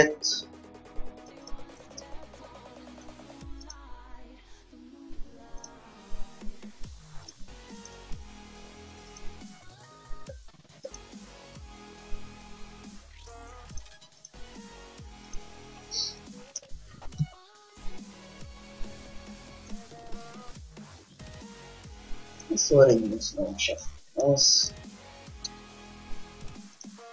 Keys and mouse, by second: 1.4 g, 3.9-5.5 drag, 4.0 g, 6.7 r, 7.6-9.7 drag, 8.2 g, 11.4 g, 14.4-16.0 drag, 14.5 g, 16.0-17.4 middle drag, 17.4 s, 22.7-23.9 drag, 23.9 g, 24.4 click, 25.6 Tab, 26.9-27.1 drag.